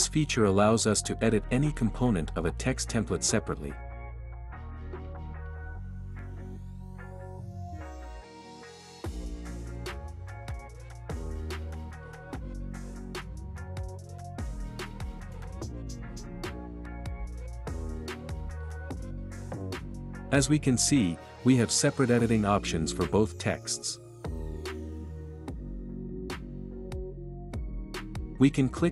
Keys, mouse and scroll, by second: 1.6-2.6 drag, 6.0-7.0 drag, 10.3 click, 13.5-14.5 drag, 15.9 click, 16.7 space, 17.9 space.